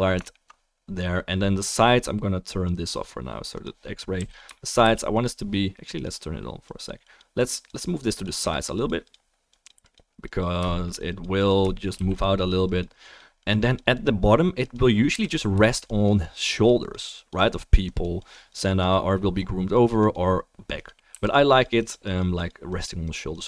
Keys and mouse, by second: 2.3 right click, 3.5 click, 4.1 f, 4.5-6.7 shift+drag, 4.8 f, 5.9 middle click, 5.9 right click, 12.1 f, 12.2 click, 15.1 f, 15.3-15.9 shift+drag, 21.1 f, 21.3 drag.